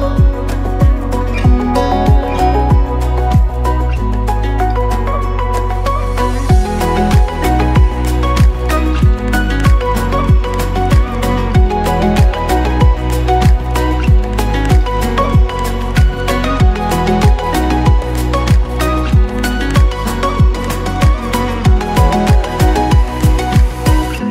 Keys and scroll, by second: 2.0 Tab, 2.8 ctrl+z, 2.9 ctrl+z, 3.5 ctrl+z, 4.6 Tab, 5.8 ], 5.9 ], 7.0-8.2 typing, 8.6 Tab, 11.2-11.8 typing, 13.1 [, 13.7 ], 17.0 [, 18.1 ctrl+z, 19.8 [, 21.0 ctrl+z, 22.1 ctrl+z, 23.2 Tab.